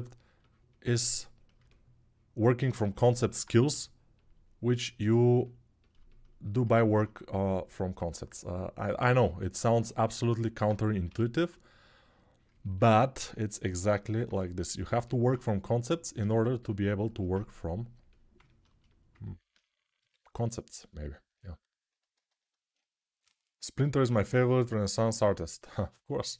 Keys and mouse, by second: 3.5 g, 10.8 g, 16.7-26.3 alt+shift+right drag, 19.8 g.